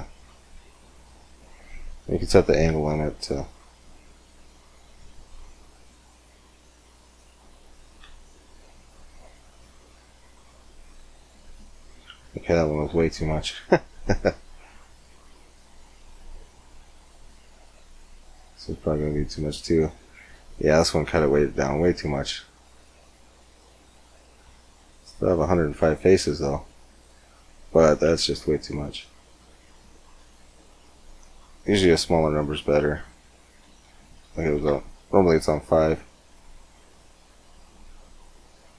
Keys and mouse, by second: 1.8-3.9 drag, 5.6-7.6 drag, 7.9 Tab, 11.1 Tab, 12.1 ctrl+z, 12.6 ctrl+z, 16.9-18.7 drag, 19.1-20.9 middle drag, 23.9 Tab, 27.4 Tab, 28.1 ctrl+z, 28.5 ctrl+z, 34.7-36.8 middle drag.